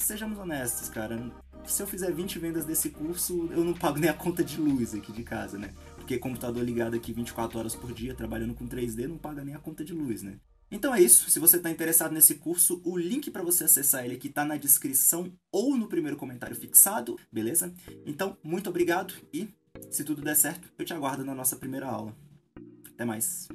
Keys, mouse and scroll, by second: 0.8-2.2 middle drag, 1.4 scroll up 2, 2.2 click, 2.6 middle click, 2.6-3.1 scroll down 4, 3.0-5.3 middle drag, 3.0 KP_0, 3.1 scroll up 2, 3.3 scroll down 2, 3.4 scroll up 2, 5.3-6.4 drag, 6.4 KP_0, 6.8 z, 6.9-8.0 scroll up 2, 9.2-12.5 drag, 13.1-14.3 drag, 14.3-17.4 middle drag, 14.4-14.9 scroll down 2, 14.9 KP_0, 15.4-16.6 scroll up 2, 17.8 KP_Enter, 18.2 click, 18.9 click, 19.7 middle click, 19.9 middle click, 20.2-20.6 scroll up 2, 20.2 KP_3, 21.4 KP_0, 22.2 middle click, 22.7-23.5 drag.